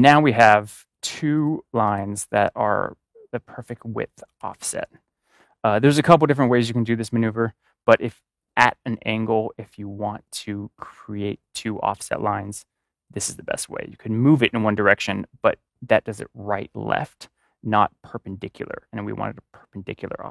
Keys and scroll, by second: 4.3 ctrl+=.